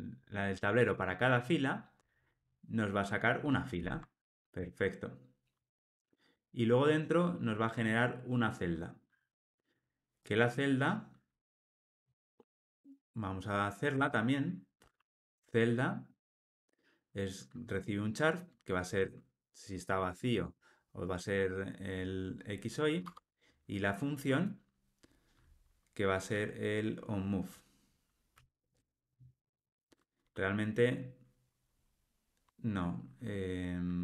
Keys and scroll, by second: 3.7 alt+Return, 12.0 alt+Return, 20.0 Tab, 23.0 Tab.